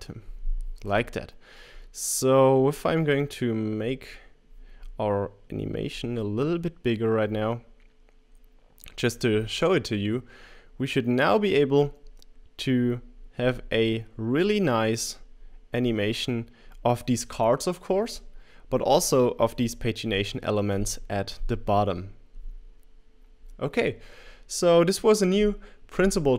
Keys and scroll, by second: 0.0-0.1 typing.